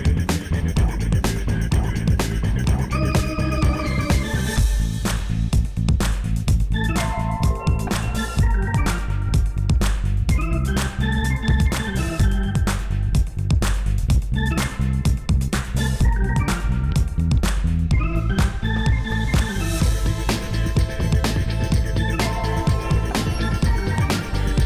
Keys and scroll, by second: 0.7 Tab, 3.5 3, 5.2 x, 6.9 Tab, 12.9 0.